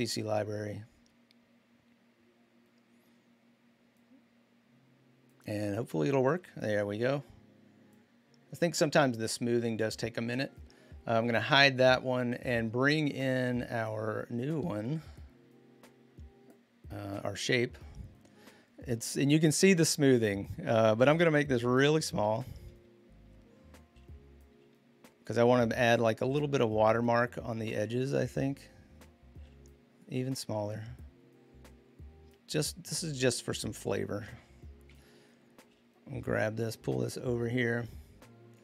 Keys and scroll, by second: 22.0 ctrl+t, 34.7 Return.